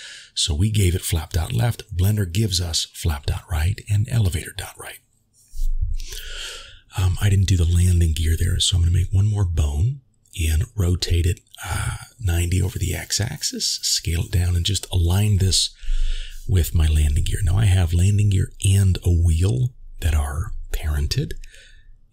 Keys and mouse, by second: 1.5-2.0 shift+middle drag, 7.8 r, 12.7 shift+click, 14.4 s, 16.3 g, 18.4 g, 20.9 shift+middle click.